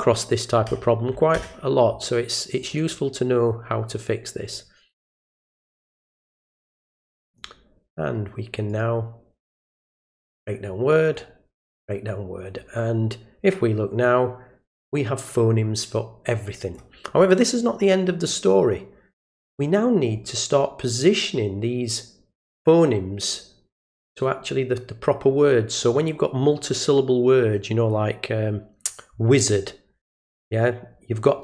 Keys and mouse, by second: 2.6 click, 4.5 click, 6.1-7.4 drag, 8.7 right click, 10.3 click, 11.0 right click, 11.7 click, 14.0-16.7 drag.